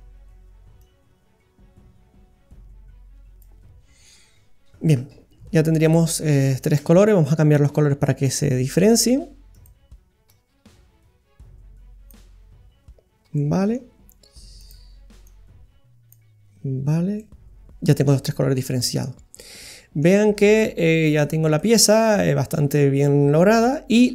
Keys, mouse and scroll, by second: 0.8 click, 5.4-6.2 scroll down 4, 5.9 middle click, 7.7-9.3 scroll up 8, 8.3 middle click, 9.5 click, 13.3 middle click, 14.6 click, 17.1 middle click, 18.5-19.8 scroll down 2, 18.8 middle click, 20.3-20.9 scroll down 6, 20.8 middle click, 21.6 middle click.